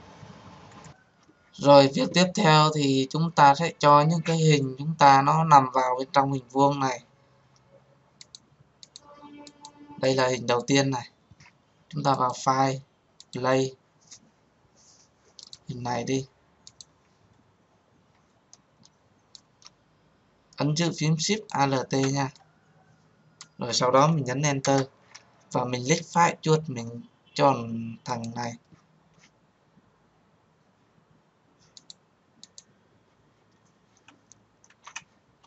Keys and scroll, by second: 24.3 Return.